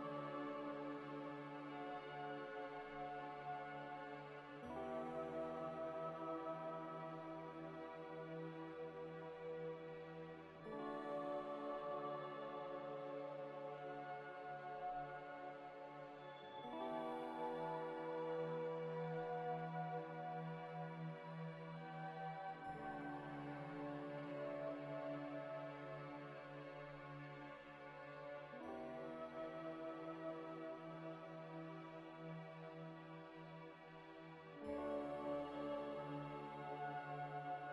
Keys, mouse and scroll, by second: 1.1 z, 1.4 middle click, 2.5 Tab, 2.9-4.6 typing, 3.4 Tab, 4.2 Escape, 5.5 ctrl+z, 6.1 scroll, 6.1 scroll down 1, 6.4 `, 8.4 `, 8.8-9.4 scroll up 1, 9.4 scroll down 1, 11.6 scroll down 1, 13.6 z, 16.8 double click, 19.2 z, 22.9 alt+Tab, 23.9 alt+Tab, 25.8 scroll up 1, 26.8 Tab, 27.4 u, 28.5 Tab, 29.8 F3, 30.2-31.2 typing, 32.4 click, 37.1 ctrl+right click, 37.4 alt+Tab.